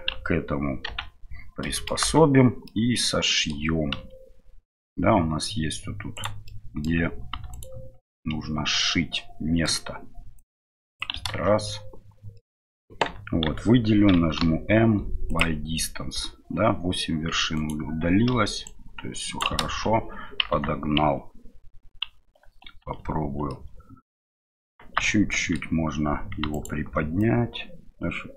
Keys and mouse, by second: 1.7 middle click, 2.7-4.1 middle drag, 3.9 KP_Divide, 6.1 right click, 6.4 middle click, 8.1-9.7 middle drag, 10.4 click, 11.3 ctrl+z, 12.3 middle click, 13.4 a, 17.6 right click, 18.6 right click, 19.4 ctrl+middle click, 19.6 ctrl+z, 19.9-22.1 middle drag, 23.5-24.4 middle drag, 25.3 middle click, 26.5 right click, 27.2-28.3 drag.